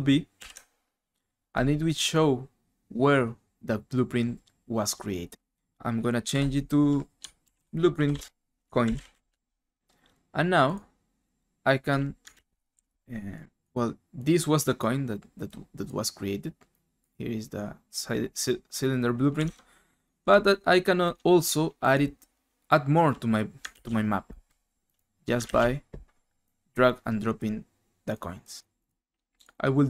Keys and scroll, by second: 0.3 ctrl+b, 6.3 F2, 7.2-9.7 typing, 11.9-13.3 typing, 19.6 alt+Tab.